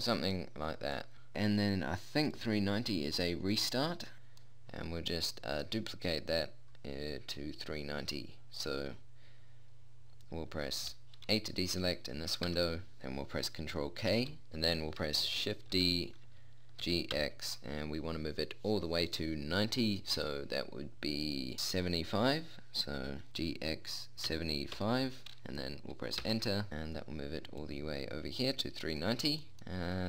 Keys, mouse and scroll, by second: 2.7 middle click, 3.6 right click, 4.8-6.8 middle drag, 12.9 a, 14.5 ctrl+k, 16.1 shift+d, 28.0 click, 29.6-30.0 middle drag.